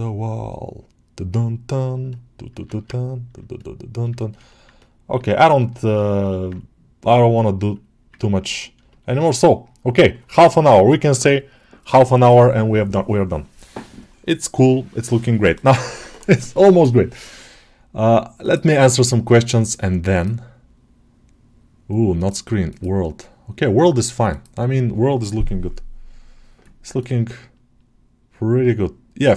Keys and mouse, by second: 2.7 ctrl+Tab, 4.0 shift+middle click, 4.3 middle click, 5.1 alt+middle click, 5.4-5.8 alt+shift+middle drag, 6.0 ctrl+alt+middle click, 7.6-7.9 drag, 8.0 ctrl+middle click, 8.3 middle click, 8.7 shift+middle click, 9.1 alt+middle drag, 18.2-24.3 right drag, 26.8-29.3 middle drag.